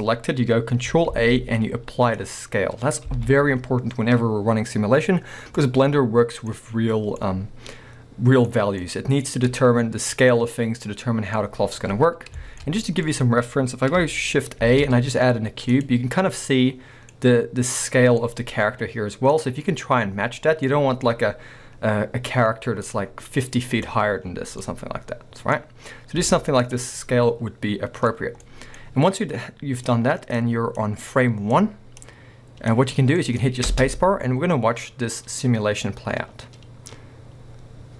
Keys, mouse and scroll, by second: 0.0-1.1 scroll up 2, 1.1 ctrl+a, 3.1 alt+a, 5.5 scroll up 2, 5.9-29.9 middle drag, 6.6-7.2 scroll up 2, 12.0-12.4 scroll down 2, 13.1 scroll up 2, 14.6 shift+a, 19.5-19.9 scroll up 2, 19.9-20.7 scroll down 2, 21.3-22.5 scroll down 2, 22.5-24.2 scroll down 1, 24.2 scroll down 1, 25.6 scroll up 1, 26.2 x, 28.1-28.5 scroll up 2, 29.9-33.2 drag, 33.2-37.9 middle drag, 33.5 scroll up 2, 33.6 space.